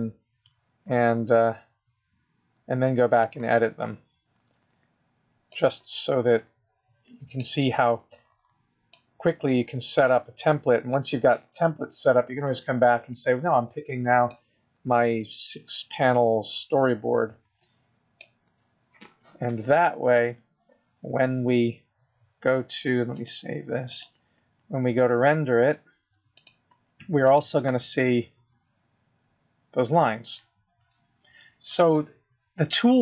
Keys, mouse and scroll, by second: 2.9 click, 8.0 click, 11.4 click, 14.9 click, 18.2 click, 25.6 click, 28.8 click.